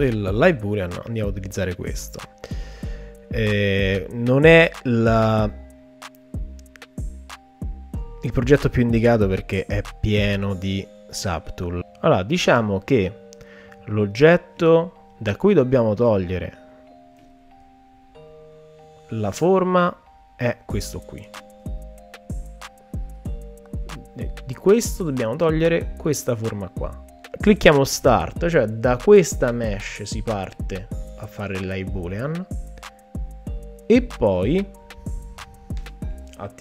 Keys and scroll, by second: 21.6 shift+f.